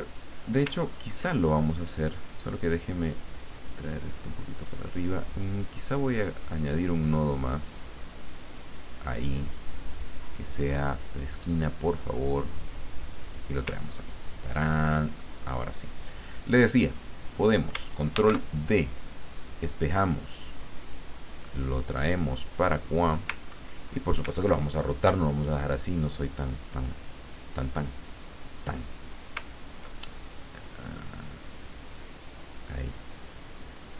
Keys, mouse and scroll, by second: 0.8-1.2 ctrl+scroll up 2, 1.8 click, 3.1-4.8 drag, 6.8 click, 8.5 click, 11.1 click, 12.3-13.5 drag, 13.9-14.2 ctrl+scroll down 2, 14.5 ctrl+scroll down 2, 15.2 ctrl+middle click, 16.9 click, 18.1 ctrl+d, 20.0 click, 20.9-22.0 drag, 22.5 click, 23.4-23.8 ctrl+scroll up 2, 24.6 ctrl+click, 25.6-26.8 drag, 27.0-29.0 drag, 29.6-30.3 ctrl+scroll down 2, 30.5-32.7 drag, 33.3-33.9 drag.